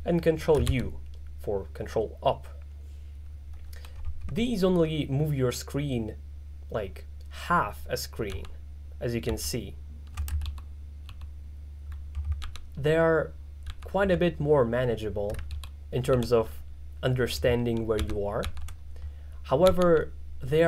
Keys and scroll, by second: 0.7 ctrl+u, 8.3 ctrl+d, 9.3 ctrl+d, 10.5 ctrl+u, 12.5 ctrl+d, 13.7 ctrl+d, 15.6 ctrl+u, 18.0 ctrl+d, 19.7 z, 19.9 z.